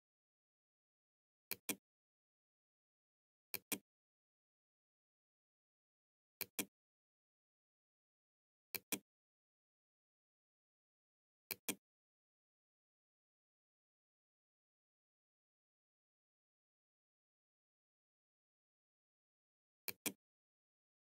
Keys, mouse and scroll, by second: 0.6 click, 2.3 click, 5.1-6.2 drag, 7.8 click, 10.6 click, 18.9 click.